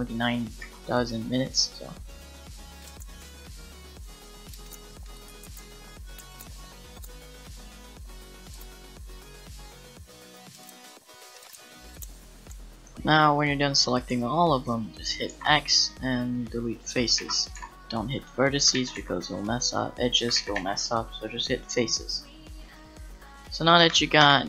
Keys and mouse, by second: 0.6 c, 3.1 c, 4.5 middle click, 4.9 c, 5.3 Tab, 5.4 Tab, 5.6 c, 6.5 c, 7.2 c, 9.0 c, 11.0 c, 11.7 c, 12.0 c, 12.5 x, 15.3 x, 17.2 ctrl+z, 17.5 x, 18.7 ctrl+z, 18.9 x, 20.4 ctrl+z, 20.5 x, 23.8 Tab, 24.2 Tab.